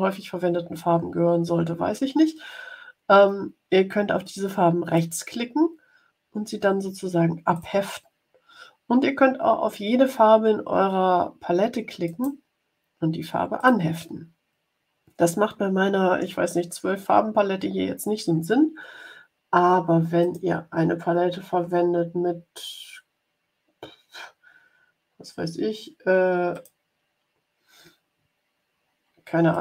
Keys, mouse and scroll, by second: 4.9 right click, 7.4 click, 12.0 right click, 13.5 click, 20.1 click, 26.4 click, 29.4 click.